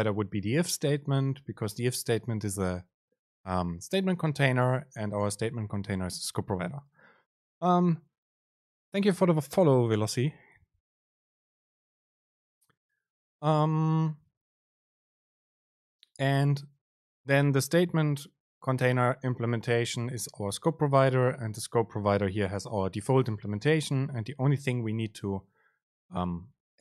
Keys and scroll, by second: 18.9 super+b.